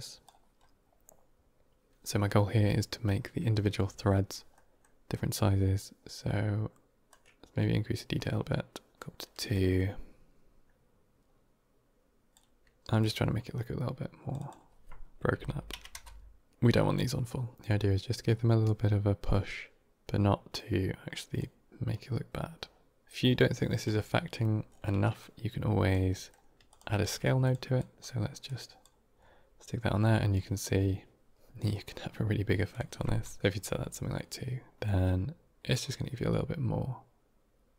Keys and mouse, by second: 4.4 middle drag, 7.0-9.0 drag, 9.4-12.2 drag, 12.9-16.8 drag, 17.4-21.3 drag, 21.7-23.0 drag, 25.1-25.8 drag, 26.0 middle click, 26.6 click, 26.9 shift+d, 27.7 click, 28.3 click, 32.6 click, 34.7-37.7 drag.